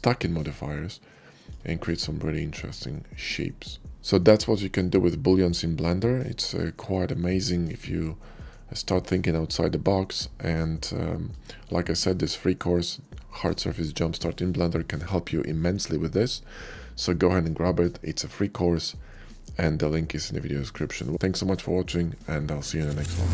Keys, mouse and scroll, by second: 1.6-3.9 shift+middle drag, 7.5-8.3 middle drag, 10.5-11.1 middle drag.